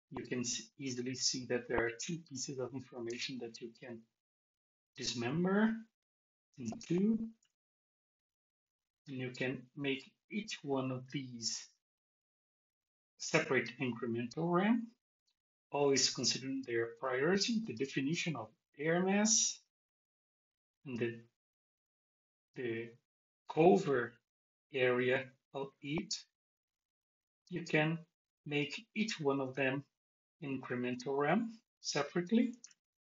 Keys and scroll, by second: 3.1 Return, 6.5 super+v, 32.6 alt+shift+x.